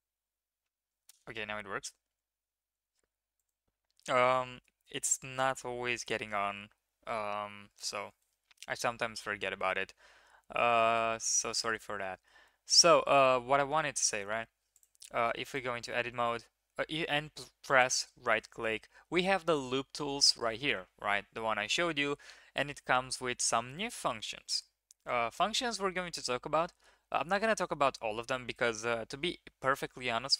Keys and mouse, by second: 0.0 s, 0.1 a, 1.3 Tab, 2.5 ctrl+z, 2.7 ctrl+z, 3.3 click, 15.9 Tab, 17.7-24.1 drag, 25.0-30.3 drag.